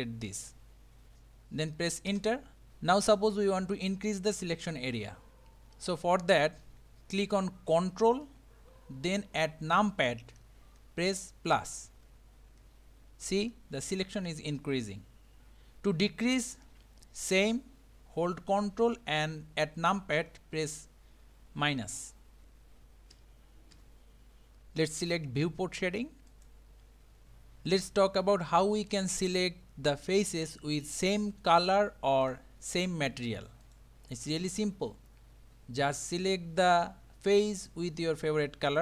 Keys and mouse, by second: 11.9 ctrl+KP_Add, 12.6 ctrl+KP_Add, 14.2 ctrl+KP_Add, 21.8 ctrl+KP_Subtract, 23.1 ctrl+KP_Subtract, 23.8 ctrl+KP_Subtract, 26.3 click, 30.2 click, 31.0 click, 31.5 click, 32.3 click, 33.6 click.